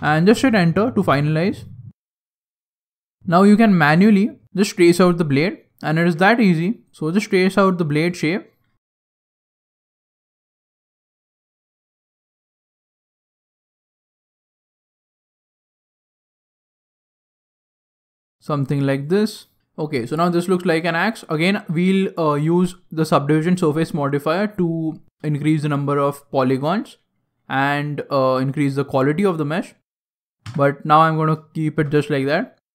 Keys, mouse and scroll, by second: 1.1 right click, 2.2 g, 5.1 right click, 5.3 g, 6.8 right click, 7.0-9.7 typing, 7.6 right click, 8.1 right click, 8.6 right click, 9.6 right click, 10.5 shift+middle click, 11.2 right click, 11.3 g, 12.2 right click, 12.4 g, 13.4 right click, 13.5 g, 15.0 scroll down 5, 15.1 shift+middle click, 15.1 scroll down 1, 15.3-15.7 scroll up 9, 15.8 right click, 16.0 g, 16.6 ctrl+z, 16.8 right click, 17.2 g, 17.7 right click, 17.8 g, 18.5 right click, 18.6 g, 19.4 scroll down 2, 19.5-20.1 scroll down 9, 19.6 Tab, 20.0 scroll up 2, 20.1-20.4 scroll down 1, 20.8 shift+middle click, 21.3-21.7 scroll up 2, 21.6 middle click, 22.3 scroll down 2, 22.6 middle click, 22.6-24.1 scroll up 1, 24.5 middle click, 25.0 shift+middle click, 30.4 KP_3, 31.1 scroll down 2, 31.5 shift+middle click, 32.1 Tab.